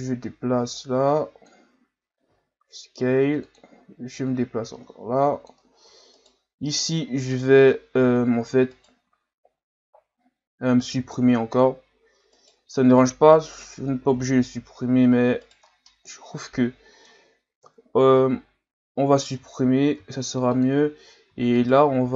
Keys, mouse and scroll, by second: 2.3 s, 4.2-6.2 drag, 6.2 alt+right click, 8.8 alt+right click, 10.9 x, 12.3 alt+right click, 14.1 o, 15.4 right click, 15.7-16.1 scroll down 3, 16.1-17.6 middle drag, 17.6 KP_1, 18.5-20.0 scroll up 2, 20.0 x, 21.5 alt+right click.